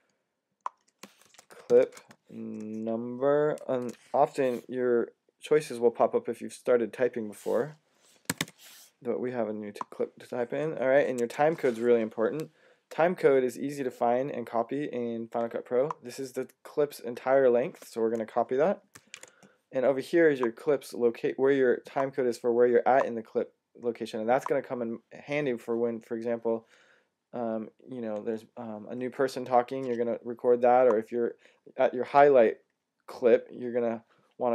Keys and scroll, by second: 0.9-2.2 typing, 3.4 typing, 7.9-8.8 typing, 11.1 Tab, 18.8 c.